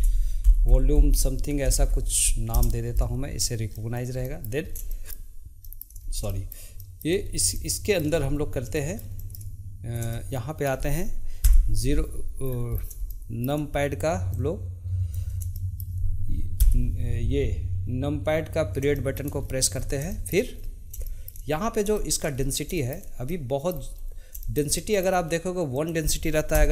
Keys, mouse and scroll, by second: 3.9-4.8 shift+middle drag, 4.8-5.2 scroll up 1, 5.2-6.1 shift+middle drag, 6.1 scroll up 2, 6.4-7.4 shift+middle drag, 7.4 scroll up 1, 7.7-8.3 shift+middle drag, 8.3-8.9 scroll up 2, 8.9-11.6 shift+middle drag, 11.6 KP_Decimal, 12.6-13.2 scroll down 2, 13.2-14.5 shift+middle drag, 14.5 click, 15.7-16.7 shift+middle drag, 16.7 KP_Decimal, 19.1-19.6 shift+middle drag, 19.6-20.3 scroll up 5, 20.3-20.7 shift+middle drag, 20.7-21.2 scroll up 1, 21.2-21.7 shift+middle drag, 21.7-22.1 scroll up 1, 22.1 shift+middle click, 22.5-22.9 scroll up 1, 22.9-24.1 shift+middle drag, 24.1 scroll up 2, 24.5-25.9 shift+middle drag, 25.9-26.7 drag.